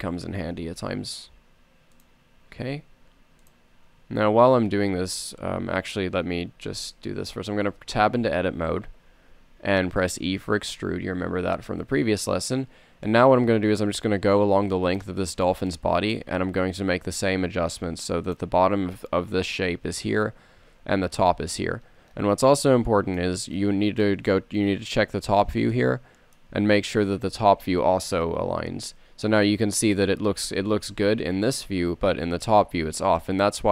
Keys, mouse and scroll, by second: 0.6 g, 2.7 s, 6.2 Tab, 11.0 e, 15.9 click, 16.0 middle click, 16.1 click, 16.2 click, 16.4 middle click, 17.2 s, 29.0 g, 31.3 Tab.